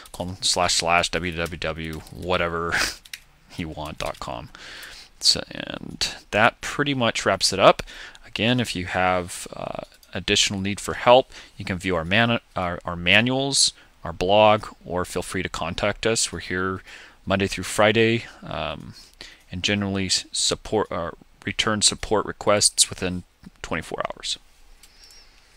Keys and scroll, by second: 4.9 BackSpace.